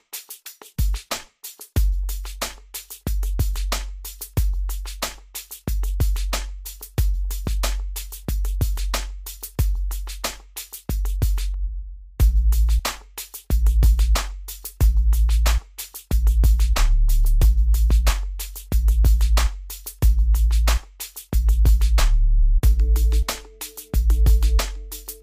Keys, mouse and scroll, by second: 0.9 click, 3.9-7.4 drag, 7.4-9.1 drag, 11.1 middle click, 12.0 click, 15.5 click.